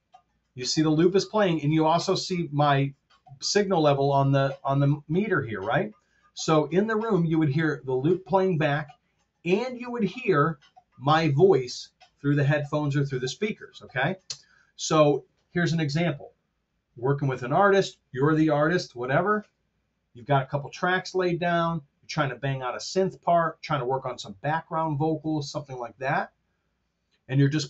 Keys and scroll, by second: 14.2 space.